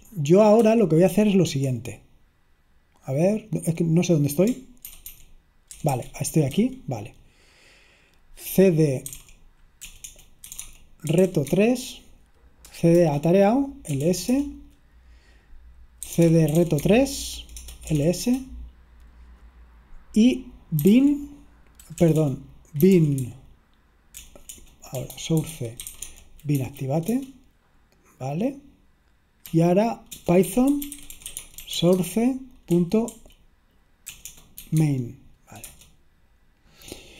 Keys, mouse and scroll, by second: 0.7 super+ñ, 1.1 super+l, 4.9 ctrl+w, 5.2 ctrl+w, 5.8 ctrl+w, 6.0 ctrl+w, 6.6 a, 9.0-11.7 typing, 13.0-18.6 typing, 13.1 Return, 20.7-27.1 typing, 29.6-33.1 typing, 34.2-36.1 typing.